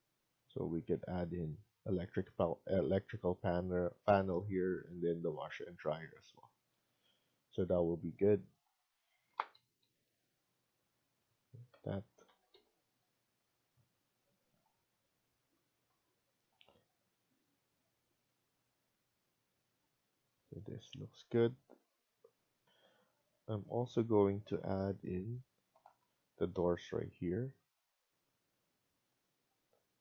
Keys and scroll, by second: 2.5 Escape, 3.4 Escape, 6.6 Escape, 9.2 Down, 9.5 Down, 9.9 Down, 12.2 Up, 12.2 Escape, 12.5 Escape, 22.5 F1, 25.4-26.3 typing.